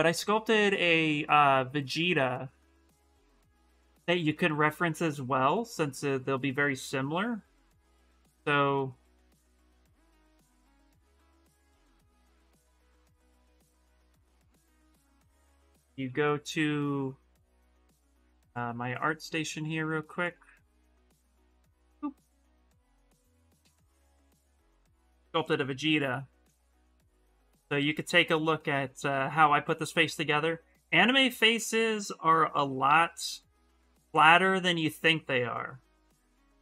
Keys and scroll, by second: 15.8 ctrl+c, 15.9 ctrl+c, 21.1 ctrl+v.